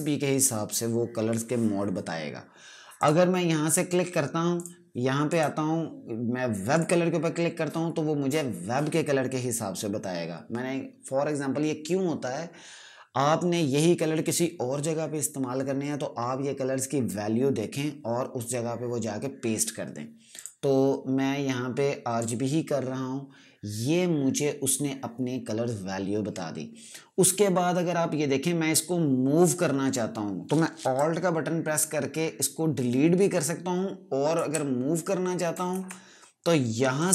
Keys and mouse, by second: 2.9 click, 20.2 click, 30.8 click, 35.6 z, 36.9 click.